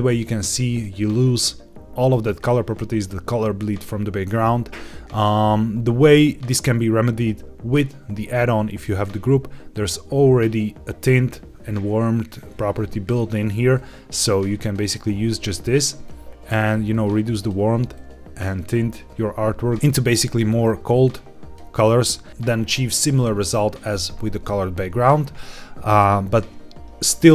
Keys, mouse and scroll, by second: 7.1-8.8 drag, 13.7-14.6 drag, 16.0 click, 16.8 click, 17.9-18.9 drag, 19.7 click, 20.8 click.